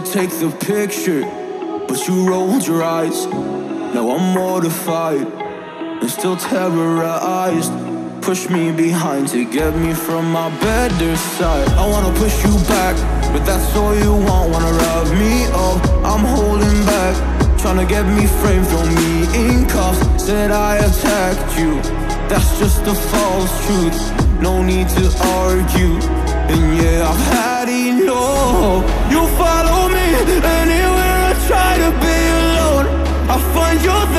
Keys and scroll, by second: 1.9 Up, 2.2 Up, 2.4 Up, 5.3 Up, 5.4 Up, 9.3 Up, 9.5 Up, 9.8 Up, 11.5 Left, 11.7 Left, 12.6 Down, 12.7 Left, 15.0 Left, 15.0 Down, 19.6 Left, 20.0 Left, 20.5 Left.